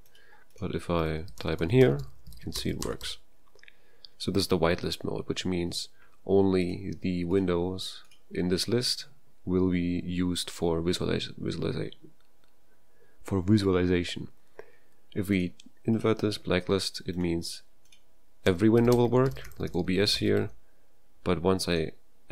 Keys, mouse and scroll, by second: 0.8-3.2 typing, 18.2-20.9 typing.